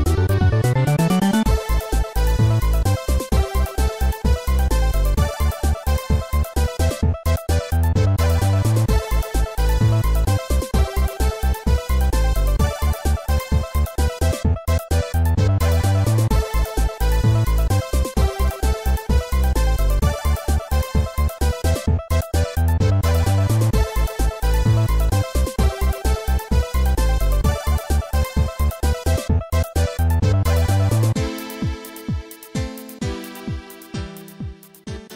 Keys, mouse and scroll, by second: 0.0-3.0 typing, 3.6 ctrl+s, 3.7 click, 4.2 scroll up 3, 4.8 middle click, 6.2 scroll down 1, 7.4 middle click, 13.5 click, 15.9 s, 17.4 ctrl+z, 20.8 scroll down 1, 22.1-22.8 typing, 24.3-25.3 typing, 25.8 ctrl+z, 30.0 ctrl+z, 30.5-31.6 typing, 32.5 scroll up 2, 33.3 right click, 34.9 right click.